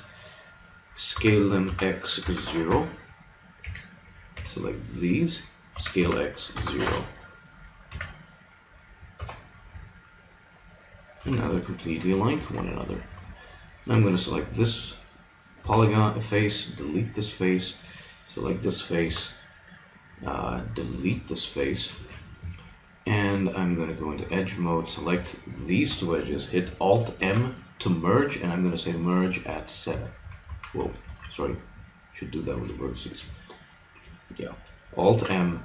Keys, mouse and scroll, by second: 1.0 s, 3.6 a, 4.3 b, 5.7 s, 7.9 s, 9.8 middle click, 11.2 z, 12.4 ctrl+Tab, 13.4-16.2 drag, 15.7 x, 16.7 click, 18.1-21.0 middle drag, 19.0 x, 21.2-22.9 middle drag, 21.9 ctrl+Tab, 24.6-27.2 right drag, 27.2 alt+m, 30.6 ctrl+z, 31.0 ctrl+Tab, 32.4-33.8 drag, 35.1 alt+m.